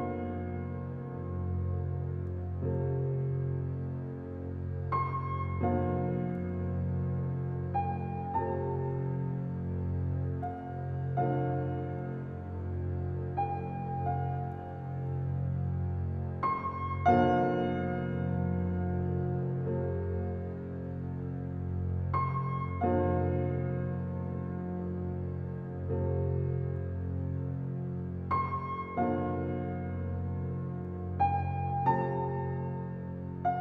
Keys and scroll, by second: 21.8 a, 24.4 s.